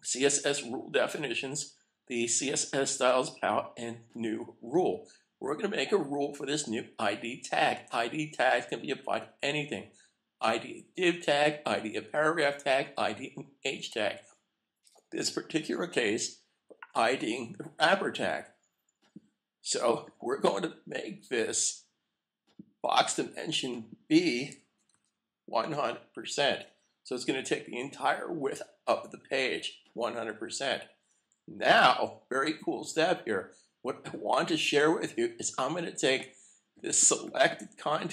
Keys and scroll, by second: 25.4-26.5 typing, 31.6 super+s.